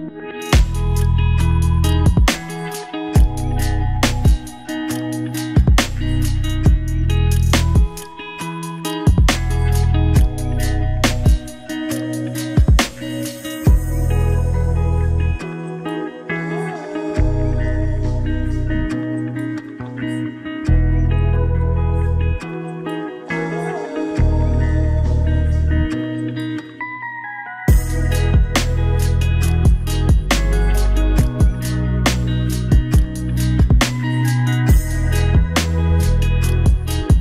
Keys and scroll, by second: 3.6 ctrl+d, 11.6 ctrl+z, 14.2 ctrl+z, 23.1 ctrl+z.